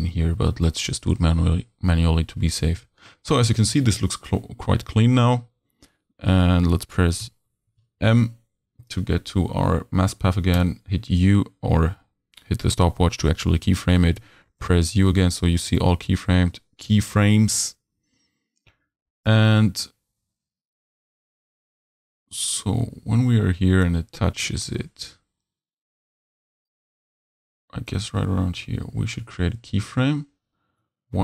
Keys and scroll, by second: 7.2 u, 8.0 m, 14.2 u.